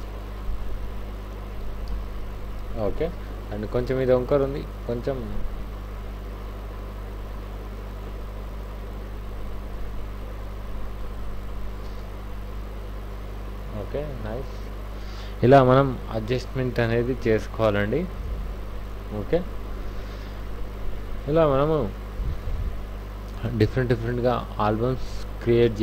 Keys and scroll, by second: 1.0 Down, 1.6 Down, 1.8 Right, 2.0 Right, 2.2 Right, 3.8 ctrl+t, 12.0 Up.